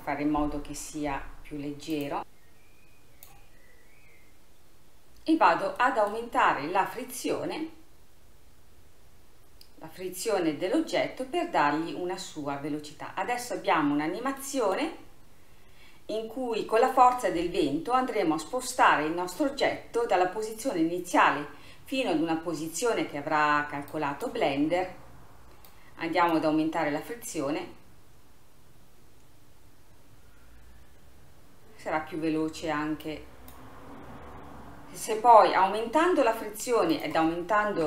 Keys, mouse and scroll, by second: 1.4-2.0 scroll down 2, 2.0-4.5 drag, 5.9 middle click, 6.4-7.7 scroll up 1, 7.7-9.9 scroll down 1, 11.2-13.7 scroll down 2, 14.4 middle click, 15.2-18.6 scroll up 4, 19.2-20.6 scroll down 4, 24.0 click, 24.9-25.7 scroll up 1, 25.7-28.8 drag, 33.1-36.1 drag, 37.0-37.8 drag.